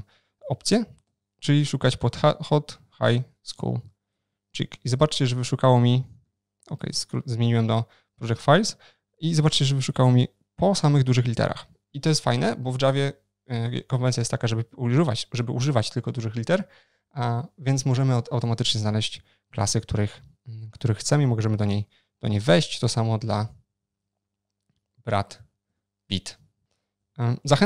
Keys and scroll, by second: 6.4 shift+super+o, 6.4 ctrl+shift+n, 22.5 ctrl+shift+n, 22.5 shift+super+o, 27.2 ctrl+shift+n.